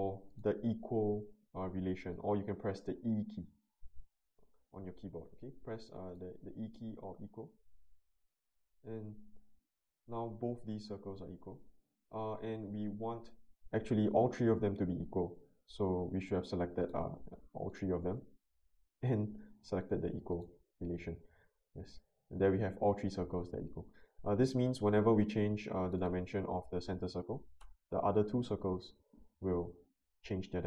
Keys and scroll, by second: 27.0-27.9 typing.